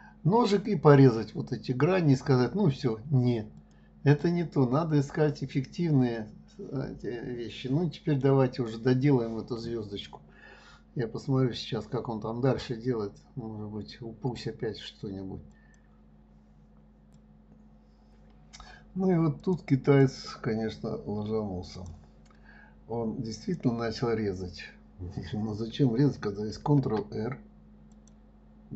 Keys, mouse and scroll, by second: 3.6 click, 4.2-7.2 middle drag, 19.8 click, 20.4 click, 22.1 click, 23.8 click.